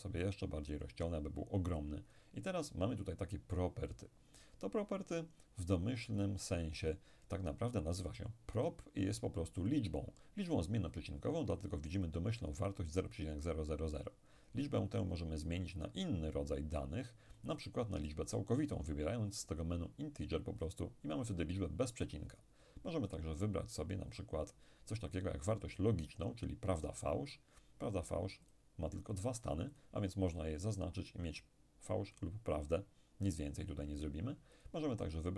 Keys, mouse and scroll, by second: 17.4 click, 20.7 click, 23.2 click, 26.7 click, 28.5 click, 32.2 click, 34.6 click.